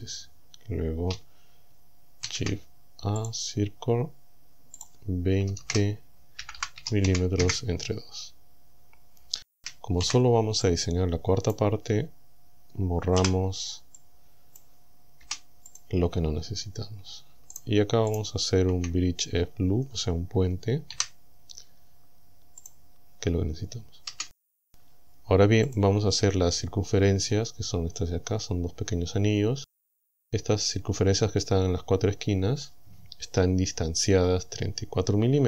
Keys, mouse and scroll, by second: 2.3 shift+a, 3.2 click, 4.8 click, 5.5 KP_2, 5.6 KP_0, 6.4 m, 6.8 KP_Divide, 7.1 KP_2, 7.4 KP_Enter, 9.6 a, 10.0 b, 10.7-11.8 drag, 13.2 b, 14.0 click, 15.2 Delete, 15.8 click, 17.6 alt+shift+right click, 18.2 alt+shift+right click, 21.0 w, 22.6 click, 24.2 a, 25.7 click, 28.3-28.6 scroll up 1.